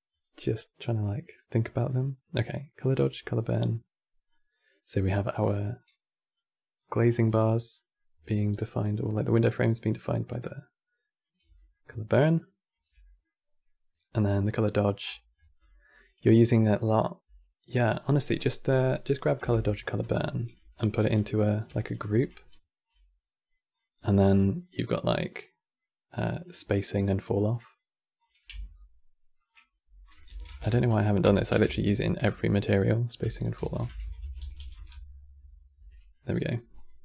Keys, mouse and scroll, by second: 6.7-7.1 scroll up 9, 7.5 middle click, 8.1-11.1 shift+drag, 11.3-11.8 middle drag, 11.8 shift+click, 12.7-14.5 middle drag, 14.5 click, 15.3 click, 17.8 scroll down 3, 18.0 middle click, 18.4 click, 18.8-19.5 middle drag, 19.5 ctrl+h, 20.2 ctrl+h, 20.6 ctrl+f, 21.4 ctrl+g, 22.0-22.6 middle drag, 22.6 click, 24.0-24.9 drag, 26.1 click, 26.6-27.9 drag, 28.3 n, 29.1 click, 29.2-32.2 drag, 33.8 l, 34.3 f, 35.5 Tab, 35.9-36.5 middle drag, 36.5 click, 36.9 n.